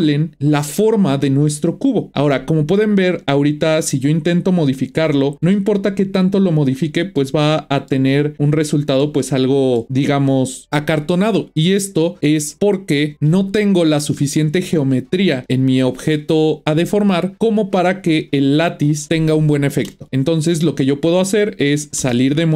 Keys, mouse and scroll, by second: 3.8 click, 5.4 g, 7.2-10.6 middle drag, 22.0 Tab.